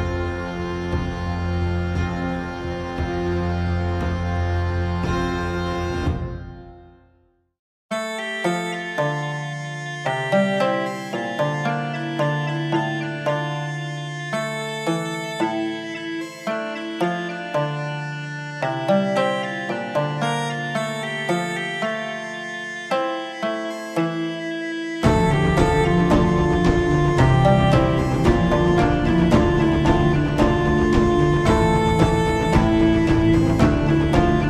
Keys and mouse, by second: 0.5-2.8 shift+drag, 4.0-7.3 shift+drag, 18.2 shift+middle click, 20.2 shift+middle click, 22.3-24.7 shift+drag, 25.4-27.0 shift+drag, 29.5 middle click, 31.3 middle click, 33.4-34.4 shift+drag.